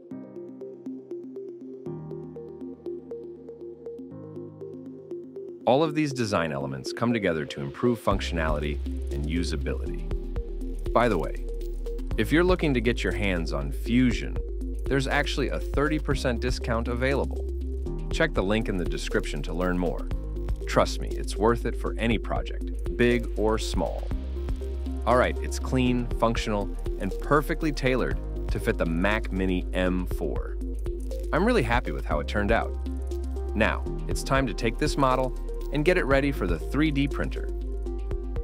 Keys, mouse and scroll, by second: 1.6 middle click, 2.3 scroll up 1, 2.9 middle click, 3.8 scroll up 1, 3.8-4.4 scroll down 1, 4.4 scroll up 1, 4.5 ctrl+middle click, 4.8 middle click, 8.8 middle click, 26.4-26.8 scroll down 1, 27.1 middle click.